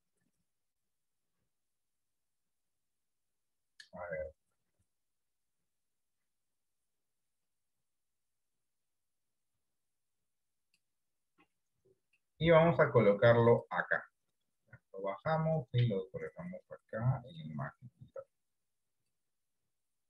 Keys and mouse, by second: 1.6 click, 13.9-17.7 drag, 18.7 click.